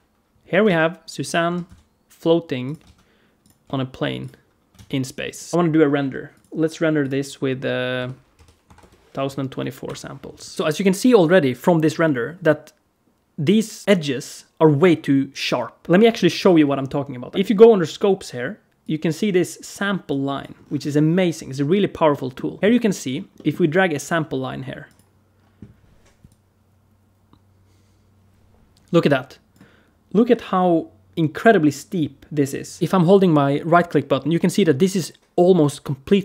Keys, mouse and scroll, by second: 0.5 alt+a, 1.1 click, 1.3 r, 2.7 alt+a, 3.2 click, 3.5 s, 4.6 alt+a, 5.1 click, 5.4 right click, 5.5 F11, 6.2 click, 6.8 click, 9.7 F12.